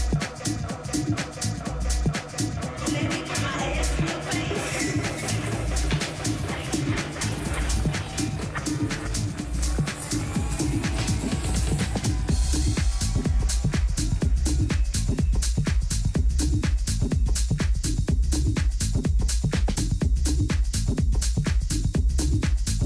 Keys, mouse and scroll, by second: 20.0 t, 21.2 KP_3, 22.4 z.